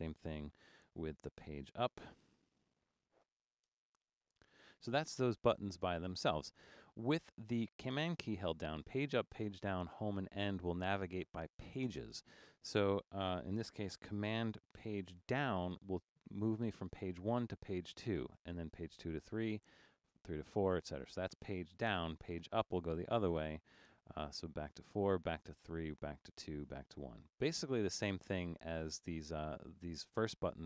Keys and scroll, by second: 2.7-3.6 typing, 3.8 Return, 15.8 super+?, 18.6 super+?, 19.8 super+?, 21.9 super+?, 25.3 super+?, 26.0 super+?, 26.8 super+?.